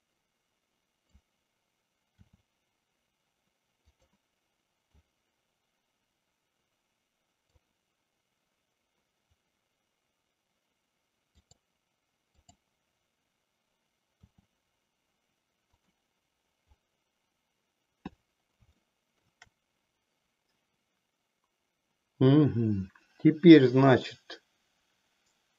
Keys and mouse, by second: 2.2 r, 4.8-7.7 drag, 11.3 click, 12.4-12.8 drag, 14.2 r, 18.8 shift+middle click.